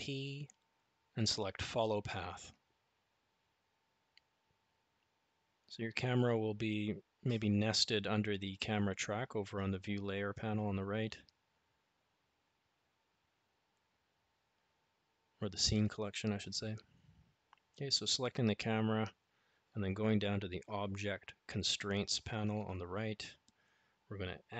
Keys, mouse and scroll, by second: 6.1 click, 15.9 click, 21.6 click.